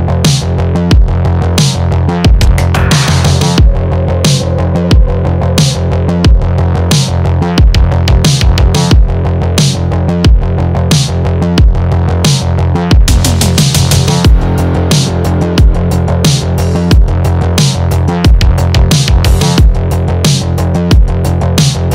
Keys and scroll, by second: 14.3 BackSpace.